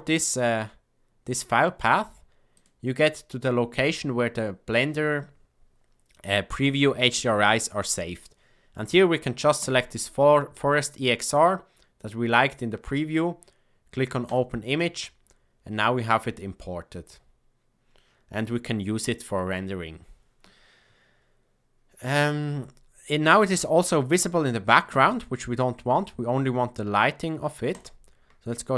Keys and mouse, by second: 27.7 click.